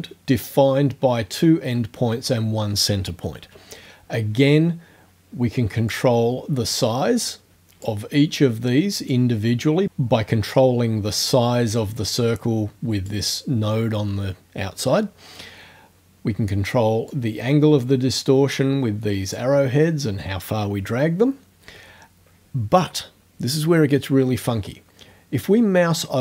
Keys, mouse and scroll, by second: 5.9-8.0 drag, 9.1-13.3 drag, 17.1-19.5 drag.